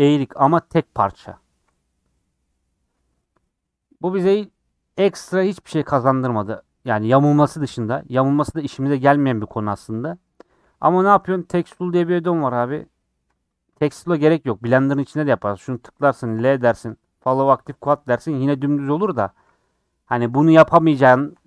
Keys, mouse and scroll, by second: 10.5 n, 14.9-16.3 drag, 16.3 l, 17.7-21.4 right drag.